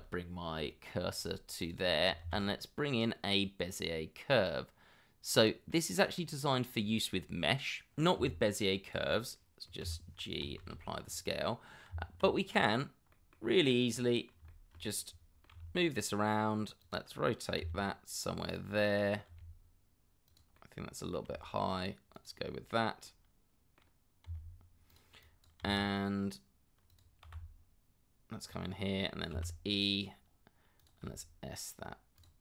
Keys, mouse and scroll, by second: 2.2 shift+a, 5.7 middle click, 6.3-7.2 scroll up 1, 8.2 s, 9.8 g, 10.6 ctrl+a, 11.4 middle click, 11.9 Tab, 13.1 middle click, 13.6 scroll down 1, 13.9 middle click, 14.5 shift+middle click, 15.0 middle click, 15.5 g, 17.6 r, 18.7 middle click, 19.3 r, 20.5 middle click, 21.2 g, 23.2 middle click, 24.2 r, 25.2 double click, 25.6 r, 27.2 g, 29.3 e, 31.0 s.